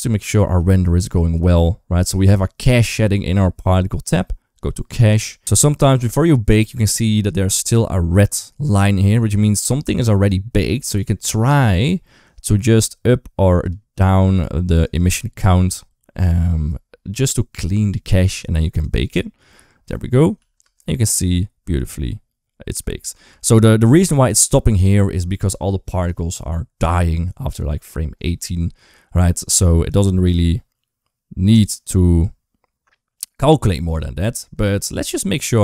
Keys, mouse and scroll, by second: 3.9 click, 13.5 click, 14.8 click, 19.1 click, 20.6 ctrl+s, 22.1 space, 22.9 space, 24.1 click, 29.7-33.5 drag.